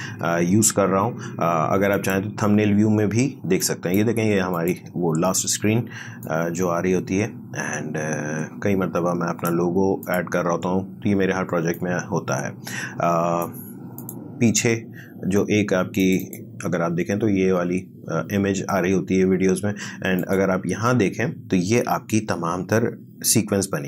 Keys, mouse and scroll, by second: 1.9 click, 2.8-13.9 drag, 20.2 click.